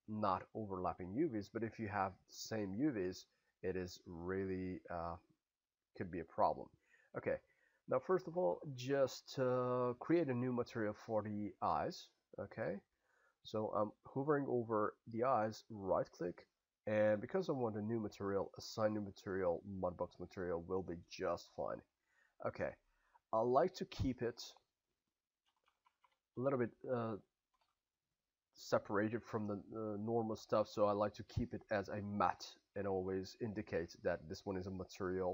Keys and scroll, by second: 25.4 BackSpace.